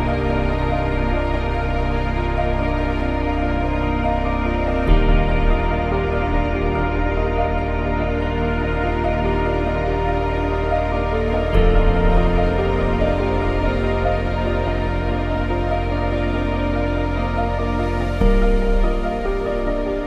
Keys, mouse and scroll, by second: 0.0 click, 0.4 click, 1.2 click, 1.3 click, 1.6 click, 1.7 click, 1.8 click, 1.9 click, 2.1 click, 2.2 click, 2.3 click, 2.4 click, 2.6 click, 2.9 click, 3.1 click, 3.2 click, 3.3 click, 4.3 click, 4.5 scroll down 2, 6.4 ctrl+x, 6.8 click, 6.9 click, 7.6 click, 7.7 click, 8.0 click, 8.4 click, 9.4 click, 10.1 click, 10.5 click, 12.4 click, 12.9 click, 13.3 click, 13.8 click, 14.2 ctrl+c, 14.4 Escape, 15.0 click, 15.6 click, 16.3 click, 16.7 Return, 17.3 click, 18.6 click.